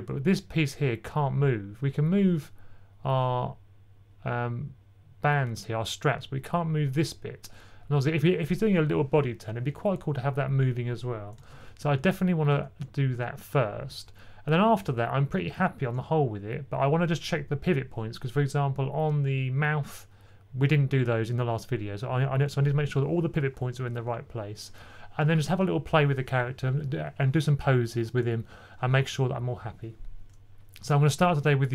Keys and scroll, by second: 11.4 super+z, 11.8 super+z, 12.4 super+z, 13.0 super+z, 14.8 typing.